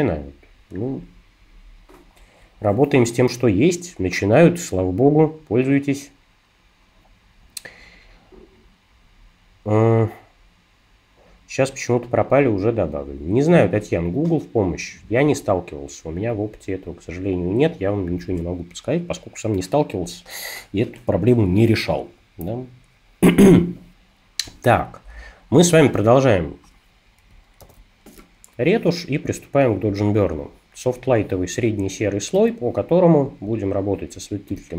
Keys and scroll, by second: 27.6 shift+super+n, 32.4 o, 34.5 super+-.